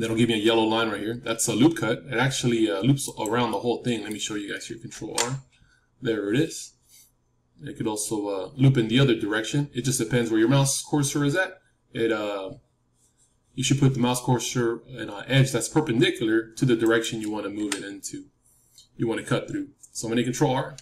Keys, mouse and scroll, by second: 3.1-5.4 right drag, 3.4-5.4 middle drag, 4.8 ctrl+r, 17.5 KP_3, 20.7 ctrl+r.